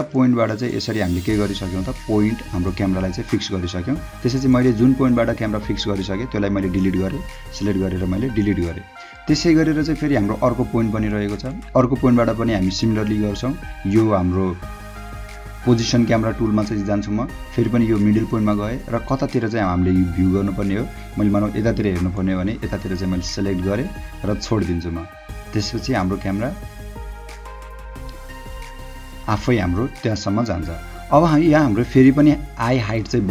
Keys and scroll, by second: 0.0 h, 3.0 space, 7.6 Delete, 8.5 h.